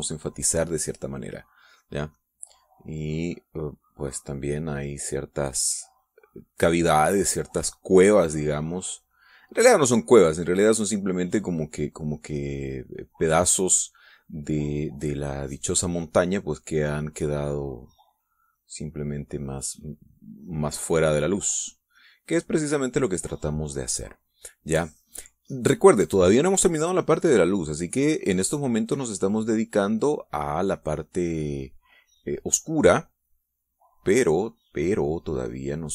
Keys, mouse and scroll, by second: 4.3-9.3 drag, 11.5-14.0 drag, 18.8 click, 19.2-22.8 drag, 30.2-31.8 drag, 34.0-35.9 drag.